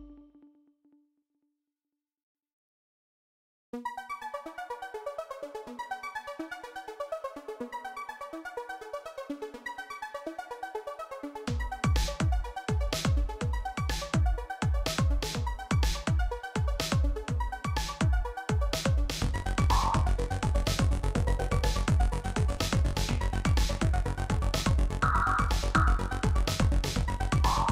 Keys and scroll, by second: 10.0 ctrl+-, 10.6 ctrl+z, 17.0 Tab, 17.8 alt+a, 26.6 Tab.